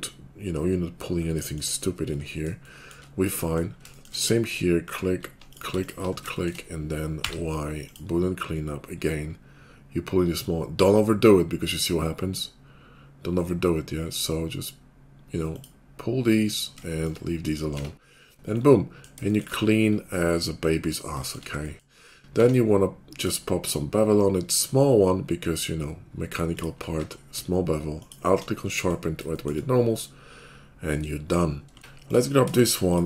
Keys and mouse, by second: 5.7 alt+click, 6.5 middle click, 7.2 y, 10.2 middle click, 10.8-16.8 drag, 16.8-21.2 shift+middle drag, 17.7 Tab, 21.2 shift+click, 21.4-23.7 middle drag, 22.3 q, 23.7-25.4 shift+drag, 27.0-31.8 middle drag, 27.0 q, 31.8 Tab, 32.2 middle click, 32.4 shift+click.